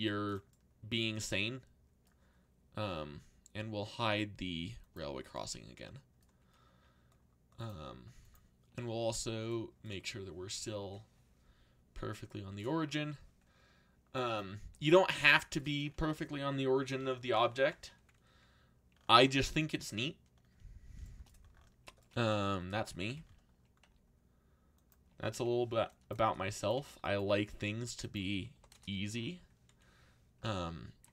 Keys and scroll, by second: 8.7 a, 14.7 z, 22.8 z, 23.8-25.8 typing, 26.2 Return, 28.5 0, 28.7 Return.